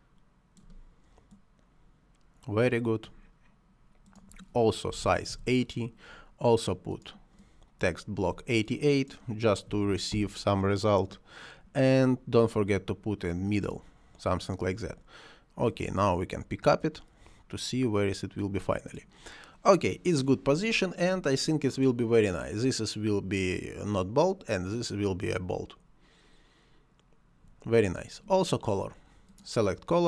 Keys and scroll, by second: 4.9 8, 5.3 Return, 9.7 8, 10.1 Return.